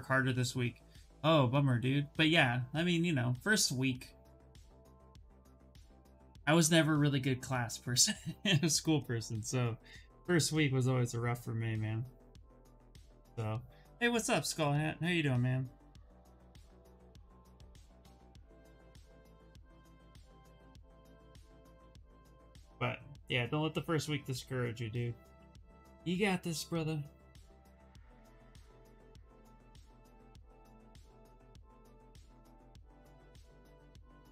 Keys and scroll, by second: 30.7 ctrl+z.